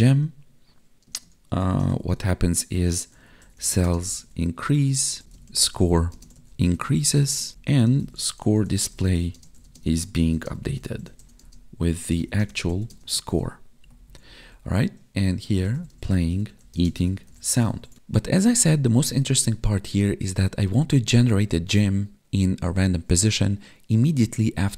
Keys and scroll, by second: 1.0 space, 2.1 space, 3.8 space, 5.2 space, 7.5 space, 9.3 space, 9.6 space, 10.3 space, 11.3 space, 12.3 space, 12.8 space, 13.2 ctrl+s, 13.8 Down, 15.9 space, 16.7 space, 17.7 ctrl+s.